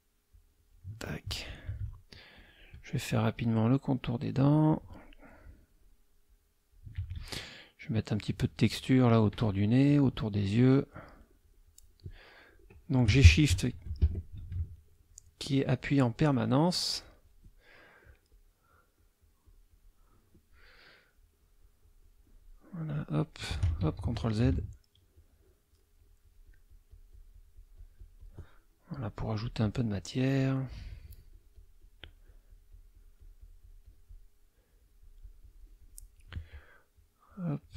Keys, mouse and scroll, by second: 0.3-0.9 shift+drag, 2.3 shift+click, 3.1 shift+click, 3.7 shift+click, 4.5 shift+click, 5.5 shift+click, 6.2 shift+click, 7.8 shift+click, 8.2-9.3 shift+drag, 9.9 shift+click, 10.3-12.1 shift+drag, 14.0 Escape, 15.0 shift+click, 15.4 shift+click, 18.7-19.9 shift+drag, 21.2-22.4 shift+drag, 22.8 shift+click, 23.8 ctrl+shift+z, 24.6 shift+click, 25.0-28.5 shift+drag, 28.9 shift+click, 30.1-34.4 shift+drag, 34.6-36.4 shift+drag, 36.9-37.7 shift+drag.